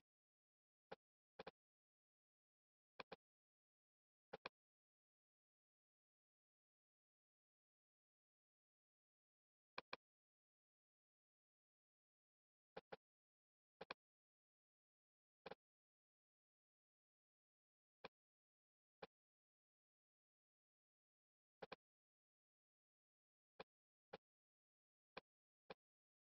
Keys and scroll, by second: 3.6 super+z.